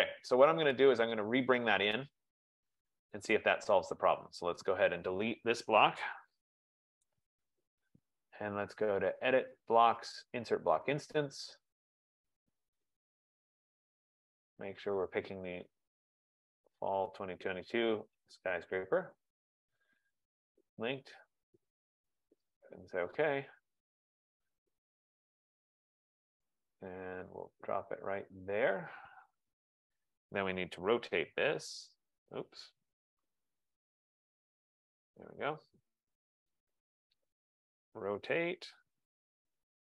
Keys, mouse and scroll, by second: 0.0 click, 1.1 click, 4.5 right click, 5.0 click, 6.1-7.5 typing, 9.2 click, 11.7 click, 13.6 click, 16.5 click, 21.3 click, 22.9 click, 26.4 right click, 26.9 F15, 28.8 click, 35.2 right click, 36.9 Escape, 37.7-39.1 typing.